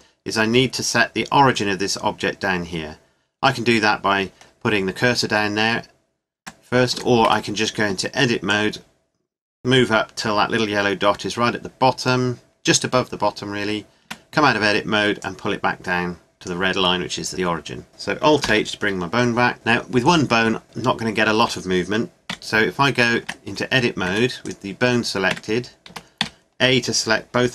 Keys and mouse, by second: 6.4 Tab, 6.9 a, 7.2 a, 8.5-10.4 drag, 13.3 click, 14.0 Tab, 18.4 alt+h, 22.3 w, 23.2 Tab, 24.1 Tab, 24.4-26.4 drag, 25.3 Tab, 25.9 a, 26.2 a.